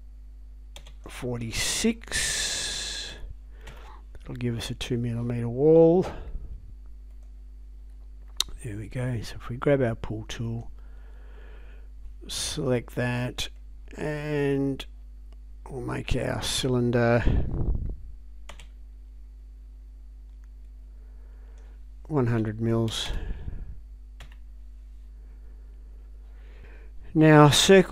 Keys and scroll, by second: 0.8 space, 2.5 4, 3.1 6, 3.7 Return, 18.5 space, 22.2-23.6 typing, 24.2 Return.